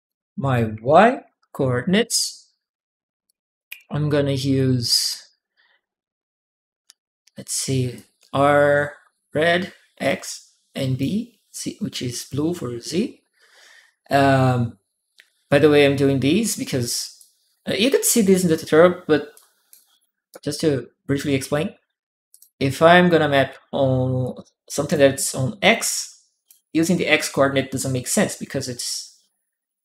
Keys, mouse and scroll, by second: 0.7 shift+y, 1.8 Return, 3.0 shift+click, 3.8 click, 7.7 click, 9.8 click, 17.0 click, 19.1 click, 19.7 click, 20.1 click, 22.1 click, 24.0 click, 25.7 click.